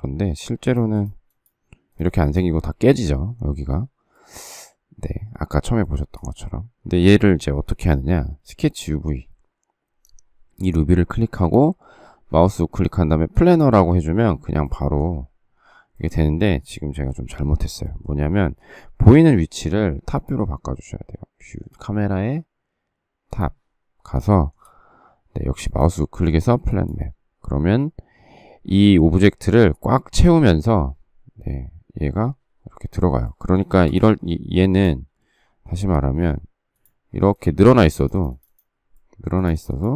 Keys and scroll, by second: 18.4 Escape, 19.0 Escape, 33.6 space, 33.8 Escape, 35.7 s, 37.5 space.